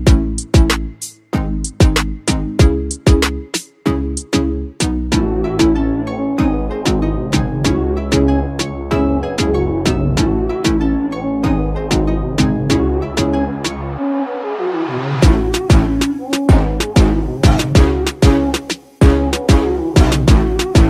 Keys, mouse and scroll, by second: 1.6 Return, 5.4 double click, 13.6-14.4 scroll up 1.